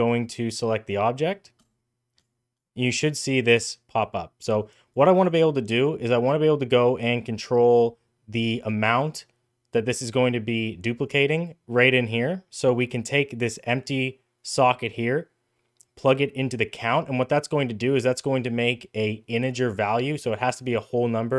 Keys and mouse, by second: 0.1 click, 4.8 click, 12.5 click, 13.4-16.7 drag.